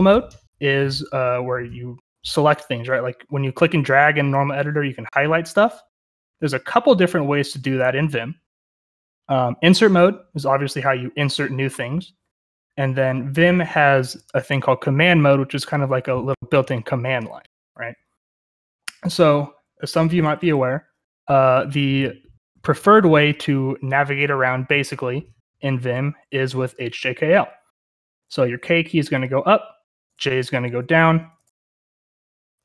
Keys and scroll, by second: 18.5-19.7 j, 19.9 j, 22.9-24.7 typing, 28.1-29.0 typing, 30.3-32.6 typing.